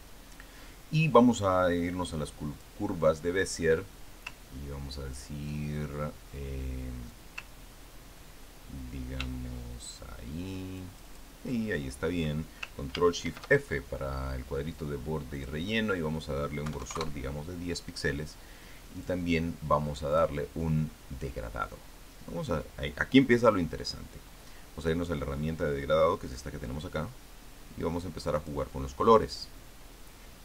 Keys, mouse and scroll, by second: 3.4 click, 7.9-12.1 ctrl+drag, 14.1 ctrl+shift+f, 16.2 click, 17.5 KP_1, 17.6 KP_0, 17.8 KP_Enter, 19.8 click, 21.0 click, 24.2 click, 29.2 click.